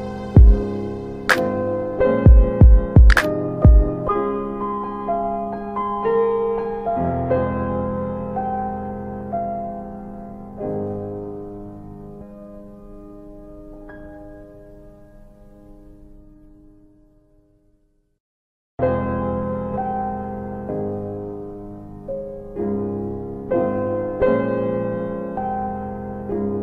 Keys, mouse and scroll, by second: 0.3 shift+click, 2.5 click, 5.0 s, 6.3 click, 8.1 alt+middle click, 9.8 click, 10.8 middle click, 10.8-11.4 scroll down 1, 11.4 scroll down 1, 11.5 middle click, 11.8-12.7 scroll up 2, 13.0 click, 15.0 shift+click, 16.0 middle click, 17.4 click, 19.0 click, 21.4 middle click, 23.0 s, 24.3 s, 25.5 click.